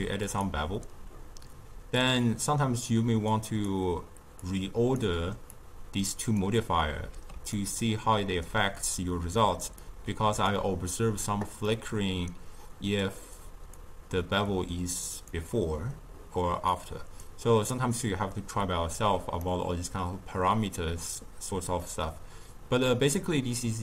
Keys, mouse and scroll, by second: 0.2 click, 0.9 m, 1.9-2.8 drag, 3.6 click, 4.4-4.9 drag, 5.5-6.3 drag, 7.6-9.8 ctrl+middle drag, 9.8-11.6 drag, 11.6-13.8 middle drag, 13.8-15.2 drag, 16.7-17.1 drag, 19.4-22.4 middle drag.